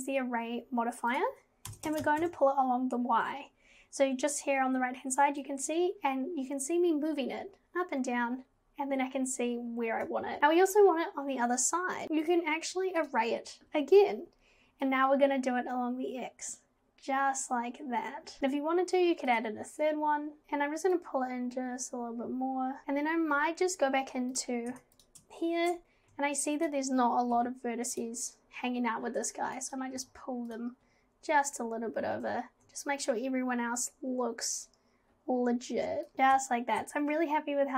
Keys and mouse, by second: 1.2-2.2 drag, 5.4-10.1 drag, 13.1 click, 14.9-18.4 drag, 21.0-22.8 drag, 24.4 click, 24.7 Tab, 26.6 click, 27.4 g, 29.7 click, 30.0 g, 36.1 click, 36.1 Tab, 36.1 g.